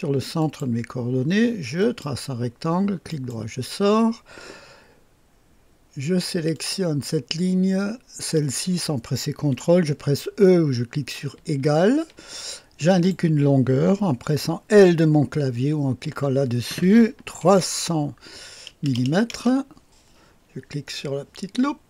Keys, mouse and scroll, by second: 0.4 click, 1.8 click, 3.1 right click, 6.5 click, 8.3 click, 11.3 e, 12.9 click, 16.0 i, 17.4 KP_3, 18.7 KP_0, 18.9 KP_0, 19.3 Return.